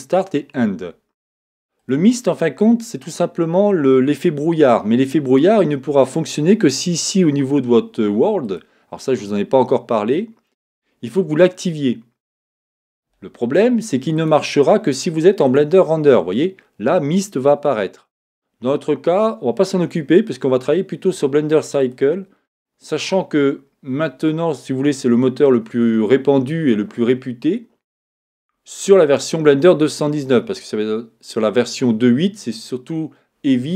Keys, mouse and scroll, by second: 8.5-18.5 drag, 21.8-23.8 drag.